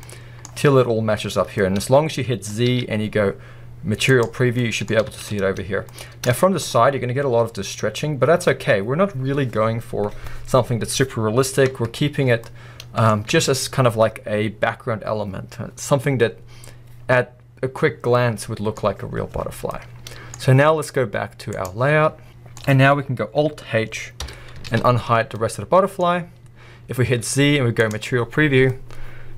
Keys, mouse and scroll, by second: 1.6 middle click, 2.7 z, 4.5 scroll down 1, 4.6 middle click, 4.9-5.9 scroll up 2, 5.2 alt+a, 6.4 shift+middle click, 6.7-8.2 scroll up 1, 8.2-8.7 scroll down 1, 11.7 Tab, 12.2 scroll down 1, 12.4-13.1 middle drag, 13.1 scroll up 2, 13.2 middle click, 13.4 alt+a, 18.0 scroll down 1, 18.1-21.5 middle drag, 21.5 click, 22.2 scroll down 1, 22.3-24.2 middle drag, 24.2 alt+h, 24.7 alt+a, 25.5-26.0 middle drag, 26.0-28.0 scroll up 1, 28.0 z, 28.7-29.3 middle drag.